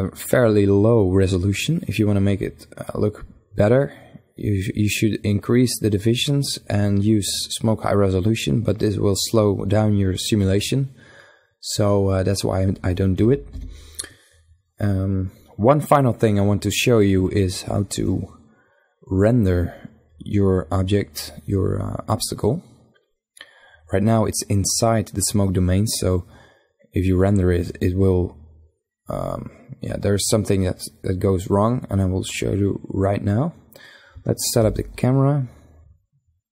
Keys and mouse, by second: 2.0-3.6 right drag, 3.6-12.0 middle drag, 12.0 KP_1, 12.6 KP_5, 17.4-19.2 right drag, 21.4-25.4 middle drag, 32.1-33.7 right drag, 33.7 n.